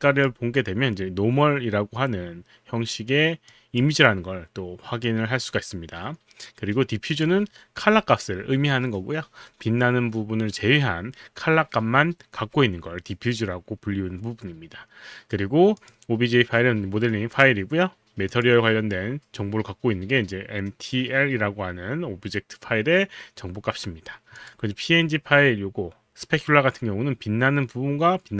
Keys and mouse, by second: 3.5 click, 5.0 click, 7.1 click, 15.7 click, 18.2 click, 24.4 click.